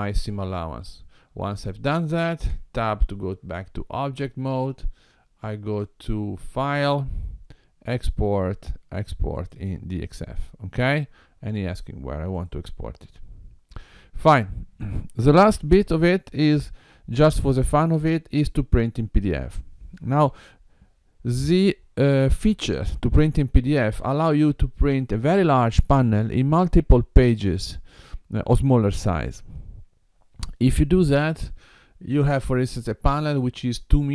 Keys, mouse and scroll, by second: 2.5 Tab, 5.5 click.